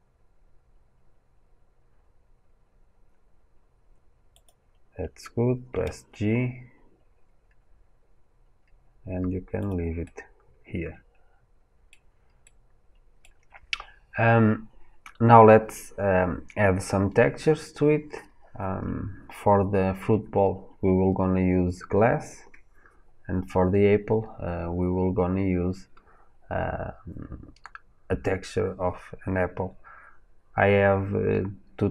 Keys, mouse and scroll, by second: 5.6 g, 9.9-31.9 middle drag.